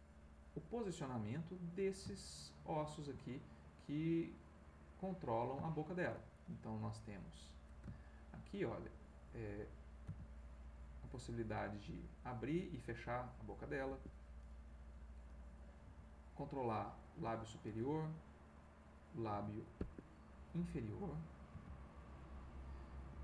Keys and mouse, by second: 1.6 click, 2.1-7.0 shift+middle drag, 7.3-8.9 drag, 9.0-10.6 drag, 10.6 g, 13.9 Escape, 15.0 click, 15.8 g, 17.2 Escape, 18.2 click, 19.3 g, 19.8 Escape, 20.4 click, 21.5 g, 23.1 Escape.